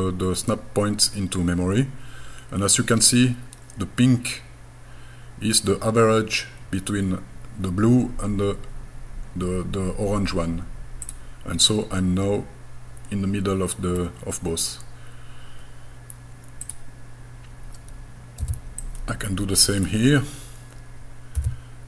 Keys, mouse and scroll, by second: 11.0 click, 11.7-14.0 middle drag, 16.6 click, 18.4 b, 21.4 g.